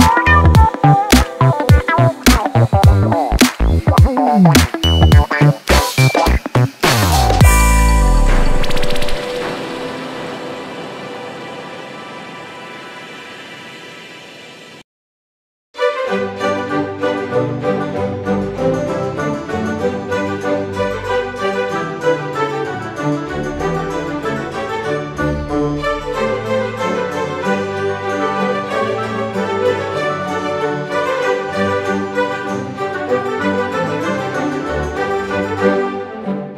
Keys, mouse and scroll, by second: 3.4 Delete, 4.3-4.7 scroll down 1, 4.9-7.1 drag, 8.8 click, 9.8 click, 11.6-12.1 drag, 12.4-12.8 scroll down 1, 13.1 click, 13.9-14.6 right drag, 14.9-15.3 scroll up 1, 15.7-18.0 drag, 18.7 ctrl+z, 19.6 click, 20.4-20.8 scroll up 1, 21.4 click, 22.0 click, 23.9 click, 25.5 click, 26.9 click, 27.9-31.0 drag, 31.6 click, 32.2-32.5 scroll down 2, 32.6-33.0 scroll up 1, 33.1 right click, 33.8 click, 34.3-35.4 drag, 35.8 click, 36.3 click.